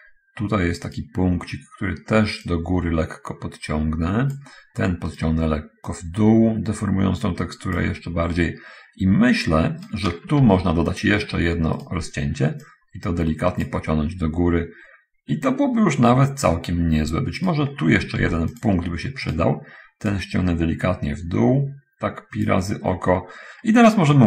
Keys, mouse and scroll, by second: 1.3 right click, 2.8-4.6 drag, 5.5 right click, 5.9-8.3 drag, 10.2 right click, 10.4 ctrl+r, 11.3 ctrl+click, 11.5 ctrl+Escape, 13.0-14.2 drag, 17.8 right click, 18.5 ctrl+r, 18.8 ctrl+click, 19.1 Escape, 20.5-22.8 drag.